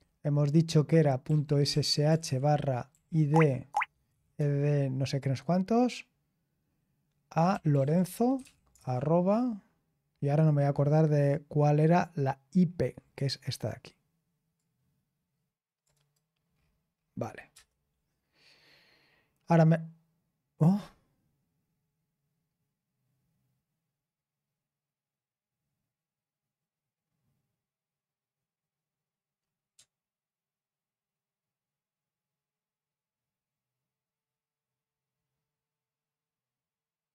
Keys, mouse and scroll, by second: 0.9-4.0 typing, 7.2-9.2 typing, 11.8-12.9 scroll up 1, 12.9-14.3 scroll down 1, 14.3 scroll down 1, 14.5-15.8 drag, 16.5-17.5 scroll down 1, 17.5 Return.